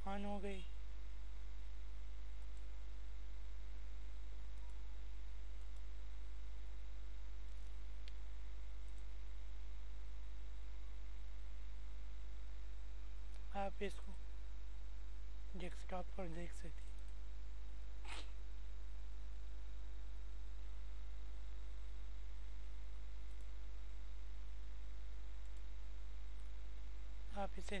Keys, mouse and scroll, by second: 5.2 click, 10.2 click, 19.5 click, 26.6 click.